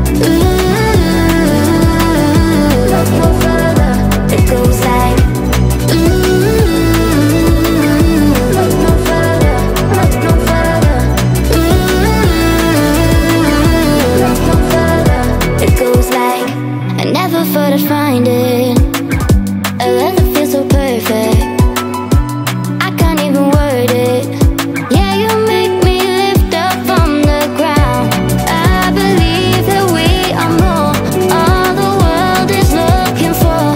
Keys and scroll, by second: 0.0-0.1 typing, 1.2-2.9 typing, 15.4 w, 16.8-19.9 typing.